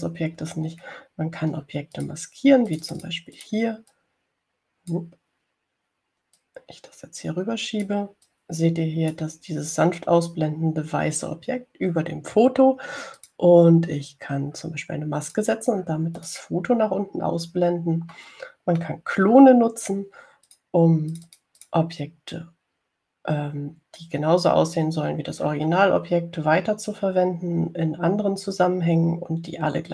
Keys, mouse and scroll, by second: 0.4 click, 1.8-2.3 ctrl+scroll up 4, 3.2 click, 4.0 click, 4.7 click, 5.2-6.4 drag, 7.6-9.4 drag, 9.6-10.7 drag, 14.4 click, 16.5 click, 17.5 click, 19.4 middle click, 21.8 click, 22.4 click.